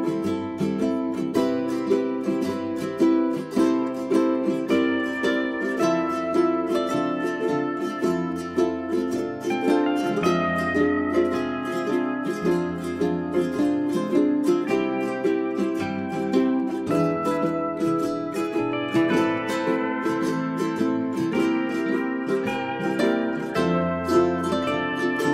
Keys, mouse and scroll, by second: 0.1 shift+click, 0.9 click, 1.6 Delete, 5.3 right click, 6.5-7.1 scroll up 1, 7.5 1, 8.1-11.1 drag, 22.3 right click, 22.5 click, 22.7-25.2 scroll down 1, 25.2-25.3 scroll up 1.